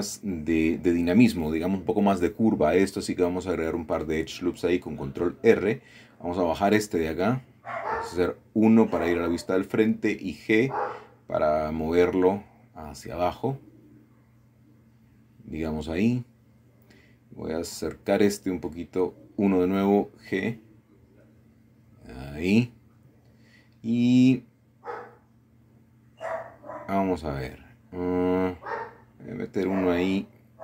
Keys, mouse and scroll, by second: 2.0 click, 3.9 click, 4.7 click, 7.8 KP_1, 8.8-9.1 scroll up 1, 9.4-10.9 middle drag, 11.9 g, 15.3 click, 16.7 middle click, 17.3 click, 17.8 middle click, 19.2 KP_1, 21.1 g, 22.7 click, 23.6-24.6 scroll down 1, 24.6 shift+middle click, 28.6 click, 29.4 click, 30.5 g.